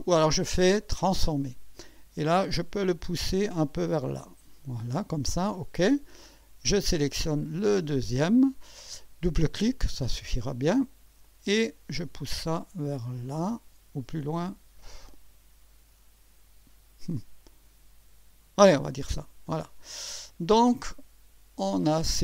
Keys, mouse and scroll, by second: 1.1 click, 2.6-4.7 drag, 5.5 click, 7.7 click, 9.5 click, 11.2-18.8 drag, 19.5 click, 20.1-21.6 drag.